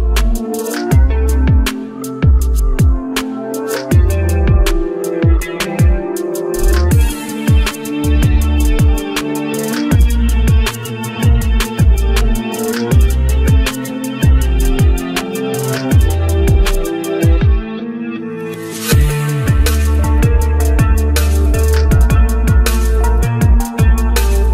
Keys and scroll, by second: 13.7 ctrl+d.